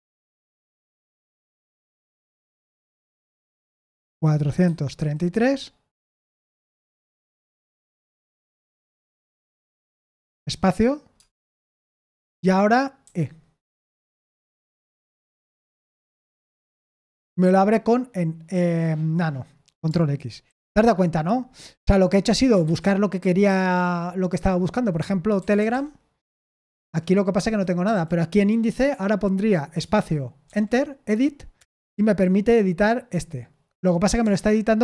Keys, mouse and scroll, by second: 0.0-2.4 typing, 3.5-5.7 typing, 11.1 space, 13.0 typing, 15.5 Return, 20.4 ctrl+x, 21.5 Escape, 22.6 /, 25.1-26.1 typing, 26.7 Return, 27.8 Down, 29.7 space, 30.4 e, 31.5 Return.